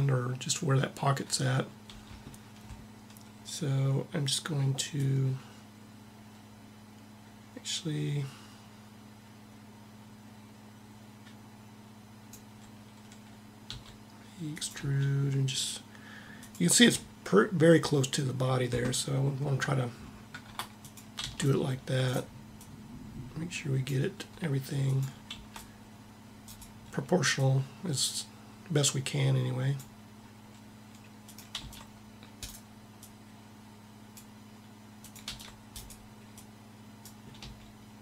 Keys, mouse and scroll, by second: 4.6-6.4 drag, 13.5 e, 14.5 g, 19.0-20.5 middle drag, 20.5 right click, 20.9 c, 21.1-24.0 drag, 24.5 click, 25.0 c, 27.1-28.8 drag, 28.8 right click, 31.0-32.4 drag, 31.3 c, 35.0 c, 35.2 c, 37.1 g, 37.2 g.